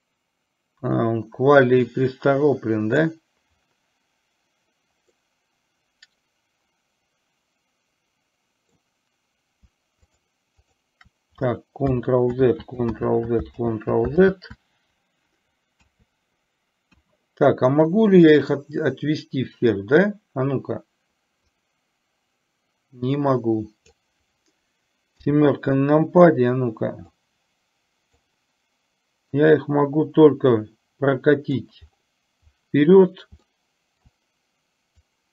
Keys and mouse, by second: 5.2-8.9 middle drag, 10.1-10.9 shift+drag, 11.1 shift+click, 12.6 ctrl+z, 18.5 click, 21.7-24.1 drag, 27.2-28.4 drag, 29.6-31.7 drag, 33.5-34.1 shift+middle drag, 35.1 click.